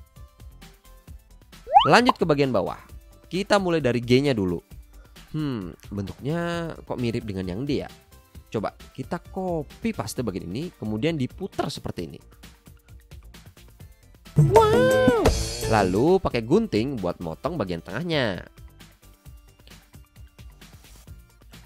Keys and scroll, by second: 7.9 v, 16.7 c, 17.9 a, 20.1 BackSpace, 21.5 v.